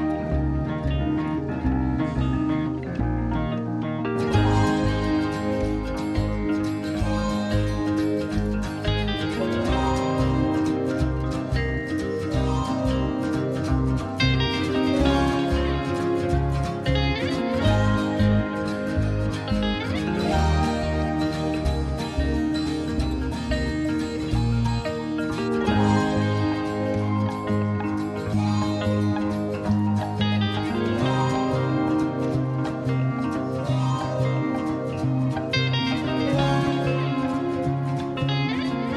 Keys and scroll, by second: 0.9-2.6 typing, 17.4 Right, 18.4 Right, 19.3 Right, 20.2 Right, 20.9 Right, 35.5 Left.